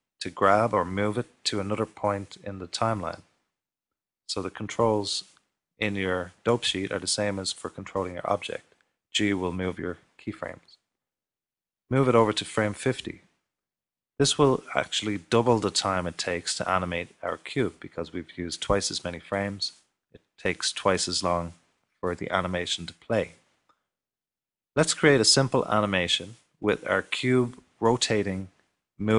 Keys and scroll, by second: 8.1 typing.